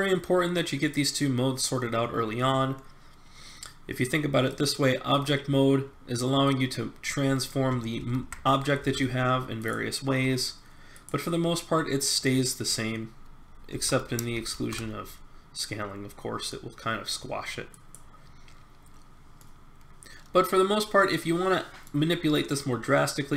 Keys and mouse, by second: 5.8 middle click, 6.4-7.7 drag, 8.0 ctrl+z, 8.8 s, 10.1 r, 13.7 s, 19.4-21.3 middle drag, 22.3-23.3 middle drag.